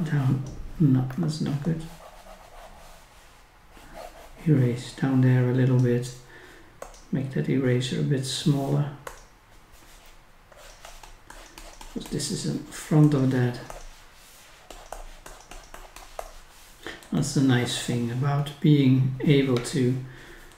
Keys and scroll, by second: 1.1 ctrl+z.